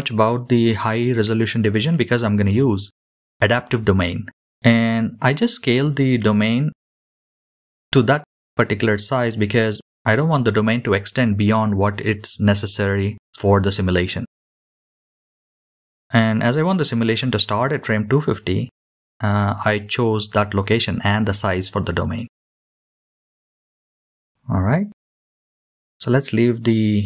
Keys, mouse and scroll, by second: 4.1-9.1 drag, 16.8-18.3 shift+middle drag.